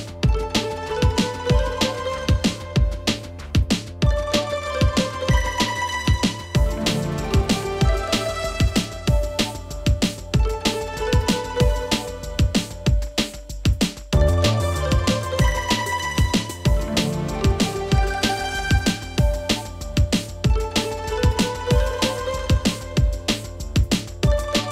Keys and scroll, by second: 3.8 Escape.